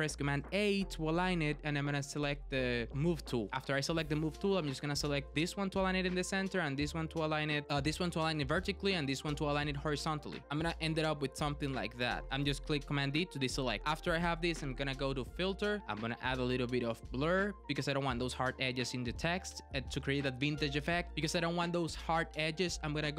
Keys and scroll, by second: 0.4 super+a, 11.0 super+d.